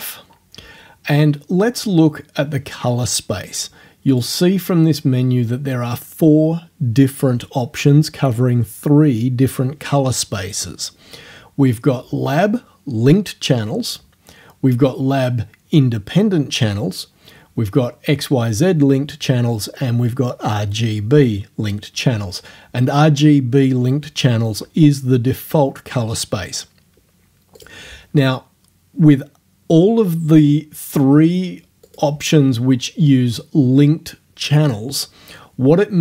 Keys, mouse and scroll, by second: 4.1 click, 27.6 click, 31.9 click.